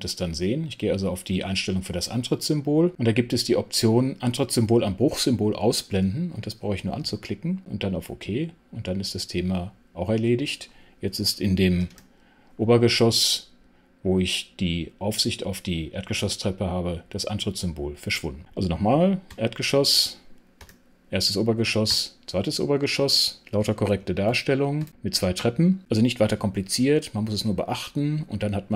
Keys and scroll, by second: 11.7 super+6, 19.2 super+5, 20.5 super+6, 21.8 super+6, 24.2 super+5.